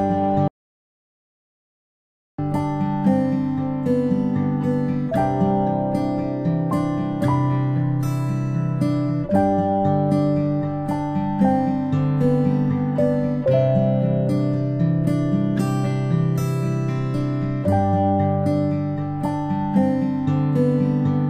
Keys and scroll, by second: 2.9 ctrl+x, 3.9 ctrl+z, 5.7 ctrl+v, 16.6 ctrl+m.